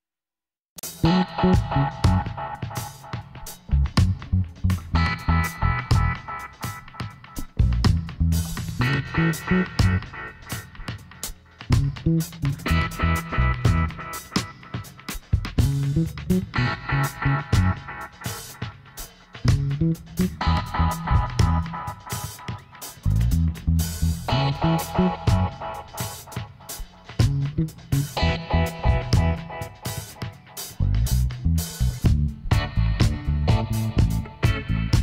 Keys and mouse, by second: 5.9-10.0 drag, 7.0 ctrl+r, 13.0 ctrl+r, 15.2-22.5 middle drag, 22.5-24.4 drag, 23.4-27.5 right drag, 27.1 middle click, 27.7 g, 33.8-35.0 right drag.